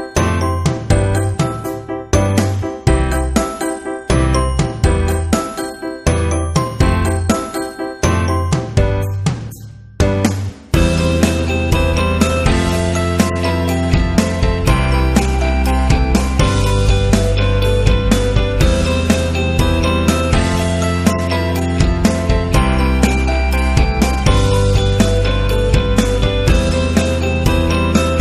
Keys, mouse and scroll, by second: 0.1 click, 1.5 ctrl+z, 2.5 click, 3.4 click, 4.6 click, 6.3 click, 8.3 click, 9.1 click, 9.5 click, 11.0-14.7 drag, 16.5-17.2 typing, 16.5 click, 17.3 click, 20.4 click, 20.6-21.3 typing, 20.8 scroll up 2, 21.6-21.9 scroll up 1, 22.6 scroll down 1, 23.2 scroll down 1, 24.1-26.2 typing, 24.1 scroll up 1, 25.1-25.7 scroll down 2, 26.0 scroll down 1, 26.6 scroll down 1, 28.1 click.